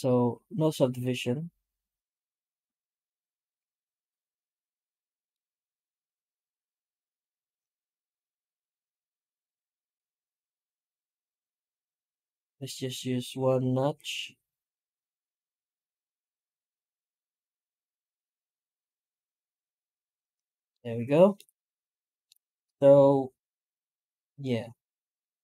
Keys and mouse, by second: 20.6-21.1 middle drag, 21.2 middle click, 22.1-22.5 middle drag, 22.5 middle click, 22.8 middle drag, 23.0-24.1 middle drag, 24.2-25.4 middle drag.